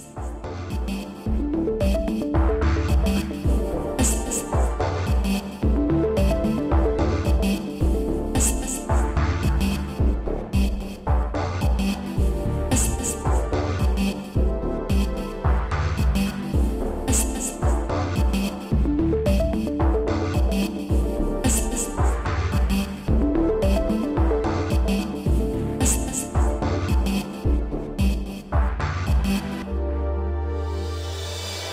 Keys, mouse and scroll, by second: 0.7 click, 4.9 middle click, 5.8 middle click, 6.3-6.6 scroll up 1, 7.7 click, 7.7 click, 8.3 middle click, 9.6 a, 10.0 scroll up 1, 10.9 click, 12.4 shift+click, 13.4 shift+click, 14.4 b, 14.6 click, 16.3 click, 17.1 middle click, 18.4 click, 19.4 Escape, 20.1 click, 23.1 middle click, 23.8 scroll down 1, 24.3 middle click, 26.1 ctrl+c, 26.5 Down, 26.9 Up, 27.8 Up, 27.8 Right, 28.3 Right, 30.2 Down, 30.5 Down, 31.0 Down, 31.0 Right.